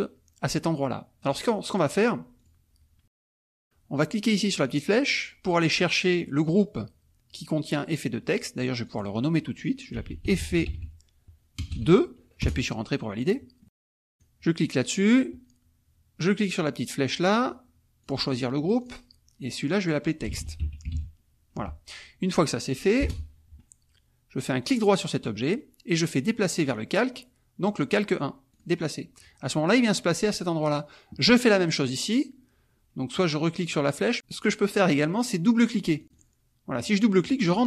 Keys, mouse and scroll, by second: 2.3 click, 4.6 click, 5.6 click, 8.8 click, 9.7-11.7 typing, 12.4 Return, 13.3 click, 14.1 click, 18.0 click, 20.1-21.4 typing, 21.5 F1, 23.0 Return, 24.6 right click, 26.5 click, 28.5 click, 31.2 click, 36.0 click, 36.7 click.